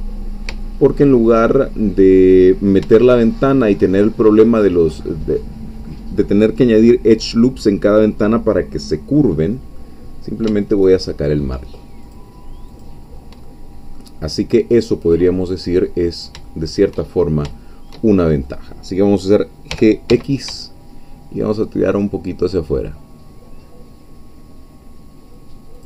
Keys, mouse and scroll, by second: 1.6-2.8 shift+scroll up 3, 3.2 shift+middle click, 9.8-12.0 middle drag, 12.0 shift+click, 12.8 shift+click, 13.5 shift+middle click, 14.2-15.8 scroll down 1, 15.8-17.2 middle drag, 17.2 shift+scroll up 1, 17.5-18.6 shift+middle drag, 19.7 g, 20.1 x, 25.7 shift+click.